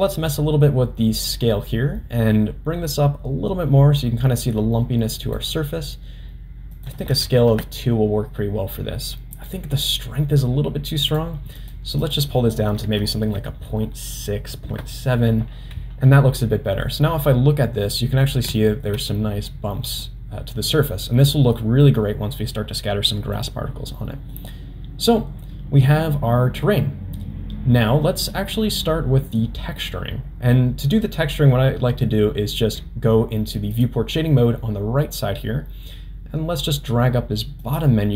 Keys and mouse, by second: 0.3-5.4 drag, 6.7-8.4 drag, 9.4-11.3 drag, 11.6 click, 12.0-15.8 drag, 16.8-17.2 middle drag, 17.9-18.2 middle drag, 18.6 shift+middle drag, 19.1-19.5 middle drag, 20.0-20.5 middle drag, 21.6 middle drag, 23.3 click, 24.1 middle drag, 34.1-38.1 drag.